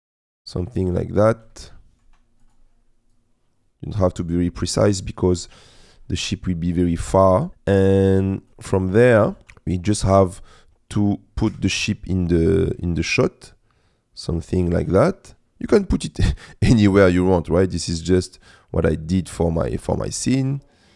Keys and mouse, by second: 1.8 shift+middle click, 2.5 click, 3.2-4.7 drag, 5.5 middle click, 6.3 middle click, 8.3 click, 9.1 click, 11.8 g, 11.8 shift+z, 19.8 r, 19.8 z.